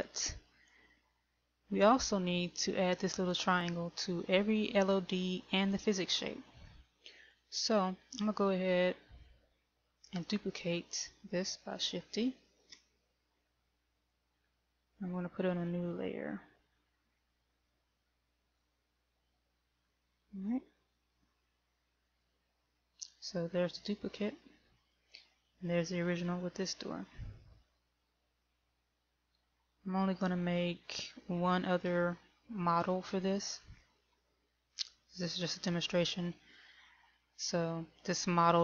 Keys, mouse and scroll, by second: 8.6 right click, 9.8 middle click, 13.0 shift+d, 16.1 m, 22.6 click, 25.1 click, 28.5 shift+middle click, 30.0-31.0 scroll up 1, 31.3 shift+middle click, 34.1 middle click, 36.0-36.9 scroll up 3, 36.9 scroll down 1.